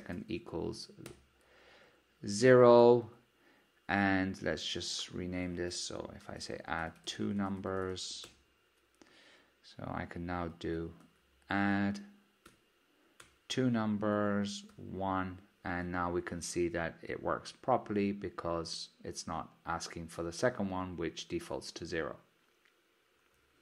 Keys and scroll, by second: 8.7 shift+F6, 13.4 Return.